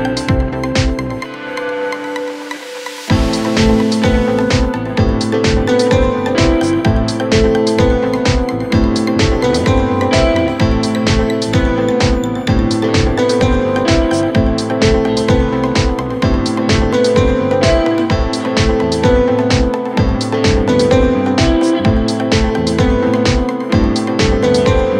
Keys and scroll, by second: 14.6 shift+Page_Down, 15.4 Escape.